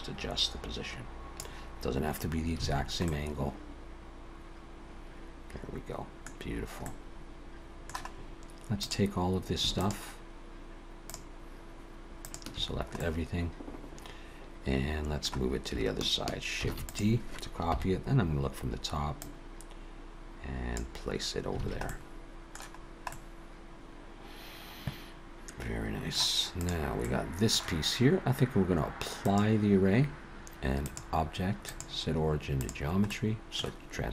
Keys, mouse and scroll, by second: 2.6 alt+a, 3.1 middle click, 6.5-6.8 scroll down 1, 6.8 middle click, 8.2-8.6 scroll up 1, 8.8 click, 9.8 shift+click, 11.1 shift+click, 12.2 shift+click, 12.7-13.4 scroll down 2, 13.0 middle click, 16.6 shift+d, 17.7 KP_7, 19.2 click, 21.6 alt+a, 21.9 middle click, 22.8-23.2 scroll down 2, 23.1 middle click, 26.6 click, 27.0 middle click, 29.2 click, 30.7 click, 33.1 middle click.